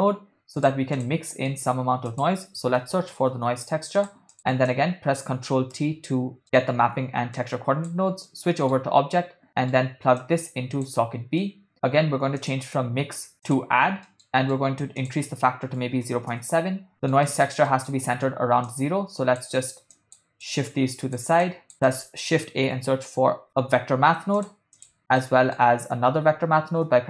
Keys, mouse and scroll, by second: 1.3 middle click, 2.0 shift+a, 4.4 middle click, 4.7 click, 4.9 click, 5.9 ctrl+t, 6.4 middle click, 7.4 click, 8.3 middle click, 9.5 middle click, 10.2-10.9 drag, 11.4 middle click, 12.4-13.6 drag, 14.1 middle click, 15.0-16.4 drag, 16.9 middle click, 17.3 middle click, 17.7 ctrl+middle click, 18.6-19.5 drag, 20.0 click, 20.4 drag, 21.4 click, 21.7 shift+a, 23.6 BackSpace, 25.2 ctrl+middle click.